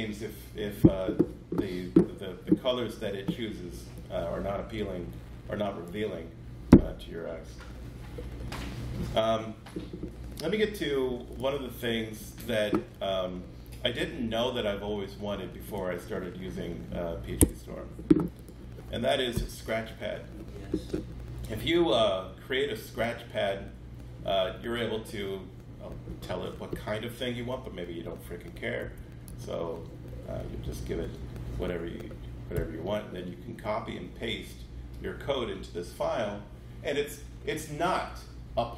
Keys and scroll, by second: 19.3 shift+super+n, 28.5-29.7 typing, 30.6 Down, 32.5 Return.